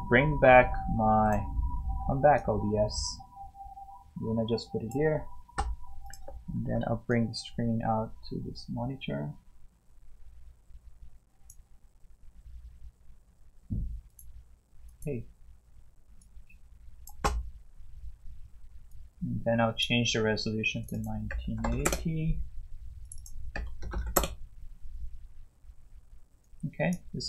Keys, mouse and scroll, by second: 1.2 click, 6.6 ctrl+8, 7.1-11.0 drag, 14.1 click, 15.0 click, 20.9 double click, 21.1-22.2 typing, 23.0 click, 23.2 double click, 23.3-24.4 typing, 26.4 click.